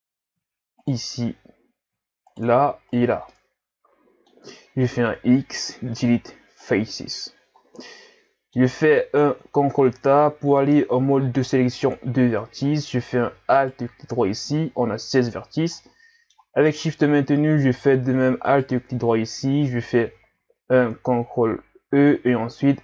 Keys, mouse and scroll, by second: 0.8 shift+right click, 1.4-1.9 scroll up 3, 2.3 shift+right click, 2.9 shift+right click, 3.3-4.5 middle drag, 4.5-5.2 scroll down 1, 5.2 x, 7.6 scroll down 2, 7.9-9.4 middle drag, 9.4 scroll up 2, 9.8 ctrl+Tab, 12.6-13.5 scroll up 3, 13.6 alt+right click, 15.8-18.5 middle drag, 18.5 alt+shift+right click, 21.9 ctrl+e.